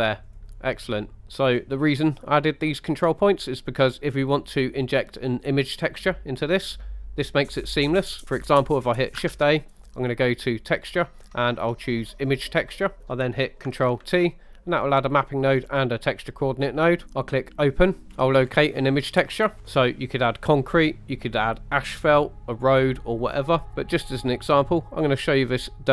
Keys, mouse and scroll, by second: 0.3 click, 6.4 middle click, 7.8 middle click, 9.4 shift+a, 13.0 click, 14.1 ctrl+t, 15.0 middle click, 15.6 scroll up 3, 16.0 middle click, 17.6 click.